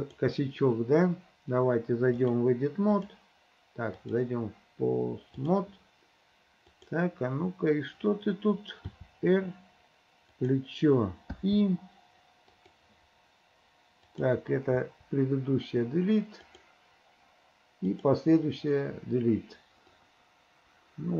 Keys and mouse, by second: 0.0 click, 2.2-3.4 drag, 4.1-5.6 drag, 6.7 click, 9.0 r, 11.5 r, 11.5 i, 12.6 click, 14.1 click, 14.9 Delete, 16.5 click, 17.9 click, 18.4 Delete, 20.0-21.1 drag.